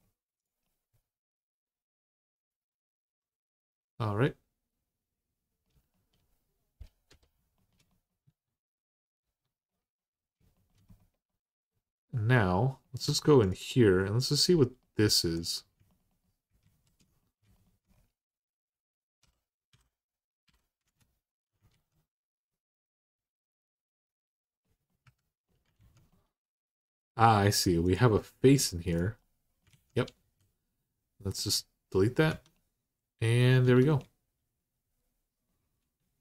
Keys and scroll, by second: 8.0 Tab, 9.0 Tab, 12.8 Tab, 16.4 alt+z, 19.0-20.2 typing, 20.6 Return, 21.5 alt+z, 22.6 typing, 24.8 3, 25.6 alt+z, 29.5 alt+z, 30.0 x, 32.1 Tab, 33.4 Tab, 36.1 2.